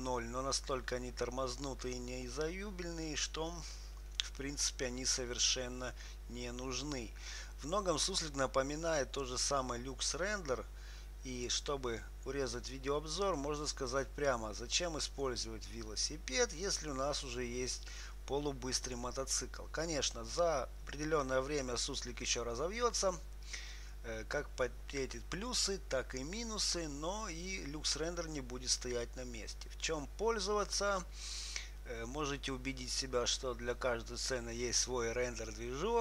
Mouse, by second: 9.6-11.9 drag.